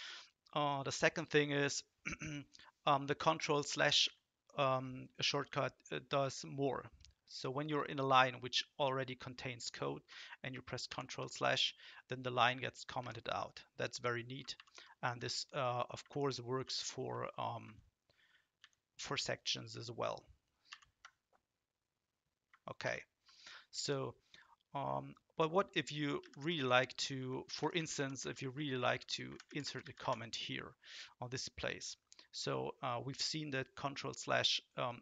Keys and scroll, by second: 3.9 Left, 4.0 Left, 10.9 ctrl+/, 13.0 Up, 14.5 ctrl+/, 15.1 Up, 16.6 ctrl+w, 17.6 ctrl+w, 18.6 ctrl+w, 20.7 ctrl+/, 22.8 ctrl+/, 26.2 Right, 26.3 Right, 26.5 Right, 27.2 Up, 27.6 Up, 27.7 Up, 28.2 Right, 28.4 Right, 28.5 Right, 28.7 Right, 28.9 Right, 29.1 Right, 29.3 Right, 29.5 Right, 29.6 Right, 29.8 Right, 30.0 Right.